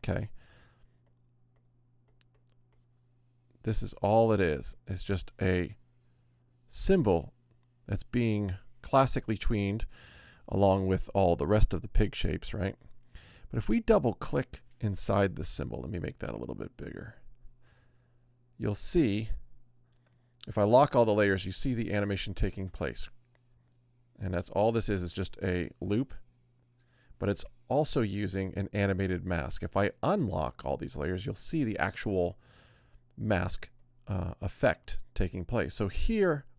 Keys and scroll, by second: 15.8 super+=.